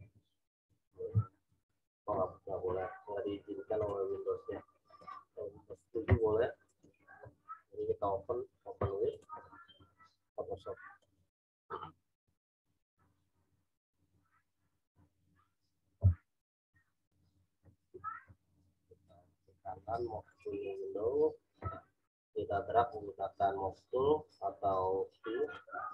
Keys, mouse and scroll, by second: 0.6 click, 1.4 ctrl+v, 3.8 click, 5.0 click, 6.6 right click, 9.0 click, 19.0 right click, 21.8 v, 22.2 click, 25.8 v.